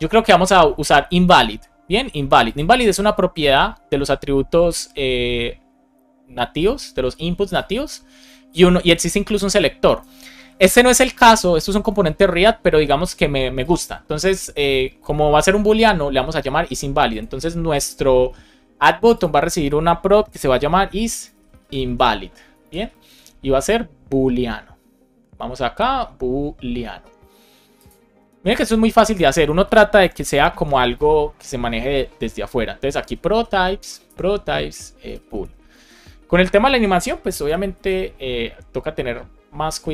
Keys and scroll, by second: 20.0 Return, 21.2 shift+i, 22.6 alt+shift+Left, 23.0 super+c, 28.4 super+v, 29.2 super+z, 29.9 Return, 30.1 super+v, 30.4 shift+;, 30.7 space, 33.0 shift+p, 34.0 Return, 35.7 super+s, 37.2 alt+shift+f, 37.7 super+s.